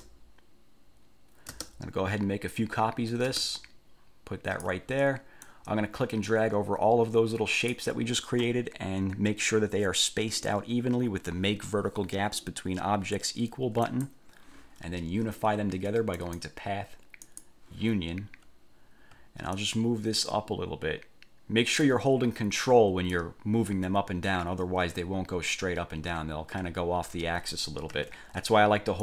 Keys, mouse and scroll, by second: 0.1 ctrl+space, 1.7 ctrl+space, 3.4 ctrl+space, 5.6-8.0 drag, 14.0 click, 16.3 click, 17.4 click, 19.7 ctrl+click, 23.2-27.9 ctrl+drag, 28.1 ctrl+z.